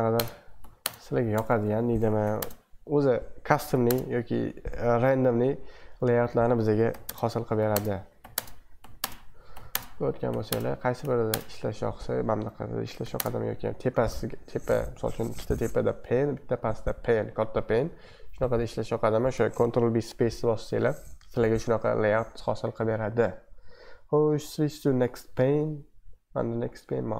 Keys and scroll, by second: 0.1-2.4 typing, 0.8 ctrl+space, 2.2 ctrl+b, 3.7 b, 3.8 space, 6.9 ctrl+b, 7.0-11.3 typing, 9.5 ctrl+b, 10.3 ctrl+b, 11.0 ctrl+b, 13.0 ctrl+b, 13.1 space, 21.6 super+2, 25.4 super+1.